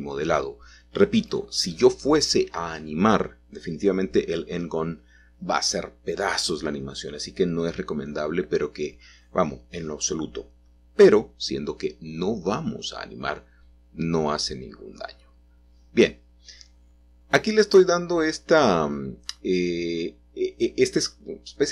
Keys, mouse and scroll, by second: 1.5-2.7 middle drag, 3.1 e, 4.0 z, 6.3 middle click, 6.5 middle click, 9.1 middle click, 11.3 s, 11.6 x, 12.5 Escape, 13.0 o, 14.0 s, 14.2 x, 16.8-18.0 middle drag, 18.6 middle click, 19.2-20.6 middle drag.